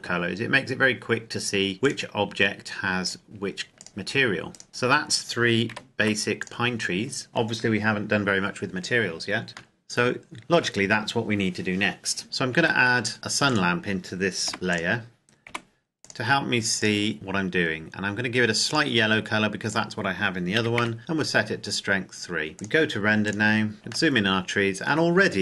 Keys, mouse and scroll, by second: 0.7-1.7 scroll up 2, 1.7 right click, 2.9 click, 4.5 right click, 4.7 a, 5.6 ctrl+s, 6.3 click, 9.5 click, 9.7 shift+middle click, 12.2 scroll down 1, 12.5 shift+a, 13.5 click, 14.3 g, 14.7 click, 15.4 r, 15.9 click, 20.6 KP_3, 20.8 KP_Enter, 22.5 click, 23.7 scroll up 1, 24.1 shift+middle click.